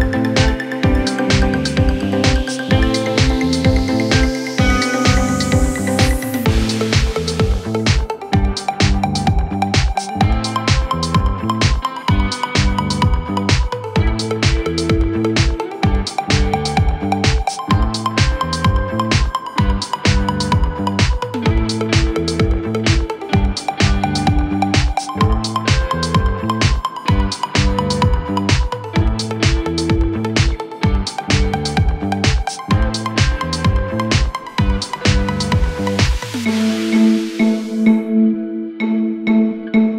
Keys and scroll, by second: 4.0 F3, 4.4 Escape, 14.6 F3, 15.5 Escape, 16.4 Delete.